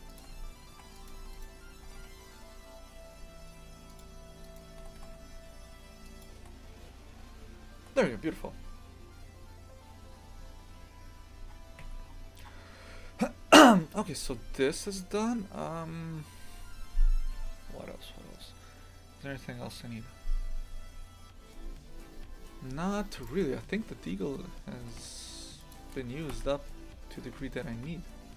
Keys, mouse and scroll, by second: 0.7 ctrl+r, 1.3 right click, 1.9 g, 4.5 right click, 4.8 g, 10.5-10.9 scroll down 2, 11.8 Tab, 12.1-15.5 scroll down 10, 23.2 right click, 24.8 g, 26.3 Delete, 26.9-27.5 scroll up 2, 27.5 shift+middle click, 28.1-28.3 scroll down 1.